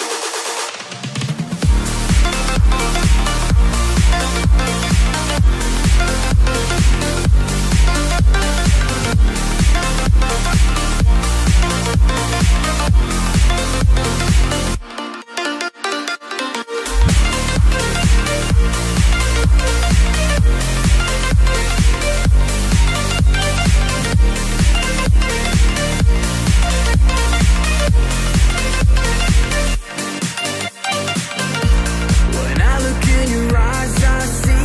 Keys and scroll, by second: 0.4 shift+Up, 15.3 shift+Down, 15.6 shift+Down, 15.8 shift+Down, 16.1 shift+Down, 16.2 shift+Down, 16.5 shift+Down.